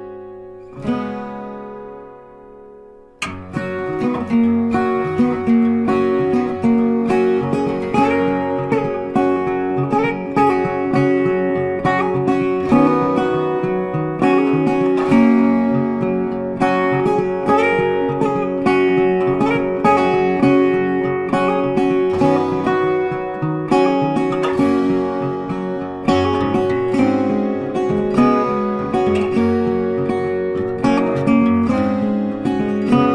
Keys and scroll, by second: 12.8 Delete, 14.8 ctrl+d, 31.5 Delete, 33.0 ctrl+d.